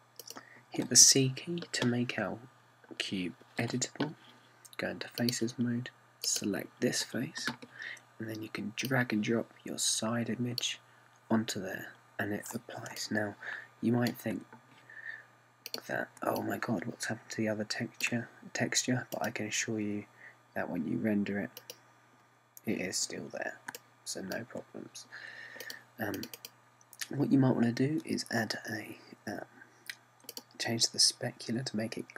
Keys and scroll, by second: 4.7 c.